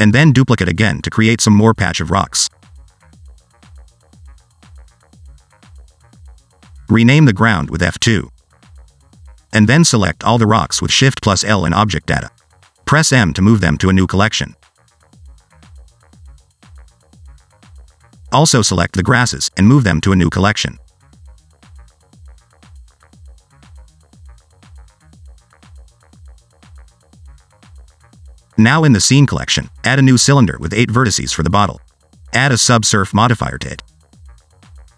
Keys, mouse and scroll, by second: 0.0 r, 0.5 s, 0.8 shift+middle click, 1.1 shift+click, 1.2 shift+click, 1.5 alt+d, 2.3 r, 2.8 s, 3.3 scroll down 1, 3.4 middle click, 3.6 scroll up 1, 4.0 alt+d, 4.8 r, 5.6 alt+d, 6.6 r, 7.1 click, 7.7 F2, 9.9-10.9 scroll up 3, 10.1 shift+middle click, 10.9 click, 12.2 shift+l, 13.6 m, 17.1 m, 18.8 s, 20.6 click, 21.4 shift+l, 23.3 m, 24.8 click, 25.0 click, 25.5 click, 26.2 scroll down 1, 27.6 shift+s, 29.7 shift+middle click, 30.7 shift+a, 32.9 click, 33.6 ctrl+2, 34.7 Tab.